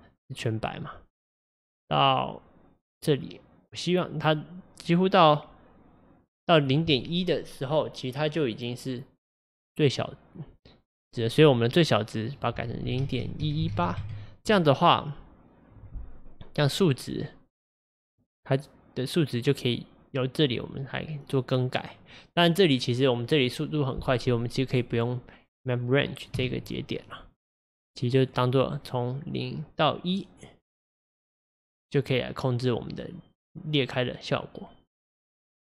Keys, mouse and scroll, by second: 14.0 KP_1, 18.1-21.1 drag, 23.5-24.7 drag, 26.4 x, 28.2 click, 28.9-31.3 drag, 32.2-35.1 drag.